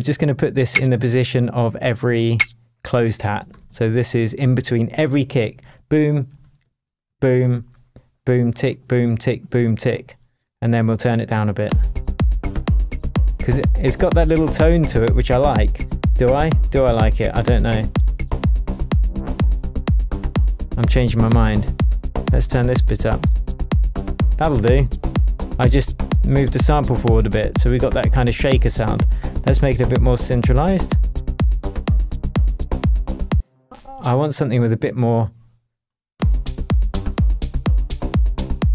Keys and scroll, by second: 3.5 super+d, 7.1 shift+super+d, 7.4 shift+super+Tab, 11.6 space, 33.3 space, 33.9 Up, 36.2 space.